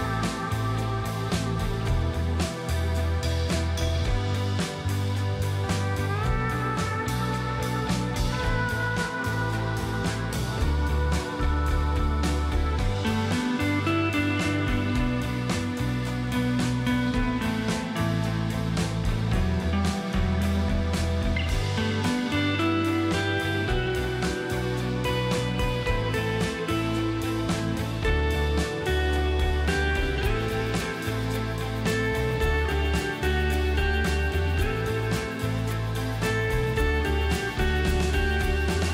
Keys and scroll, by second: 18.7 space, 27.9 shift+space, 33.8 ctrl+x, 37.0 alt+shift+t, 37.5 ctrl+alt+shift+a, 38.2 ctrl+alt+shift+v.